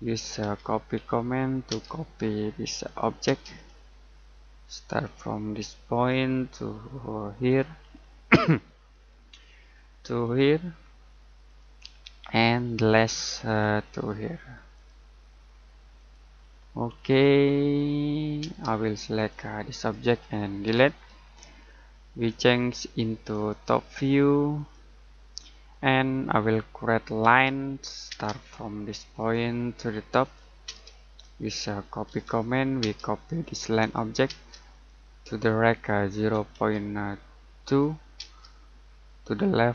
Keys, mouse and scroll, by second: 0.4-1.7 typing, 2.8 click, 3.2 space, 3.5-5.6 scroll up 1, 6.0 click, 7.8-8.3 scroll down 1, 8.3 middle click, 8.7-10.2 scroll up 1, 10.2 click, 11.8-12.3 scroll down 1, 12.3 middle click, 12.6-12.9 scroll down 1, 12.9 middle click, 13.2-14.7 scroll up 1, 14.7 click, 16.4-17.7 scroll down 1, 17.7 middle click, 18.4 space, 19.1 click, 20.5 Delete, 21.4 middle click, 23.3 click, 26.1-26.5 scroll down 1, 26.5 middle click, 27.2-28.0 typing, 29.1 click, 30.6-32.8 typing, 33.4 click, 34.2 space, 34.7 click, 36.1 typing, 37.3-38.1 typing.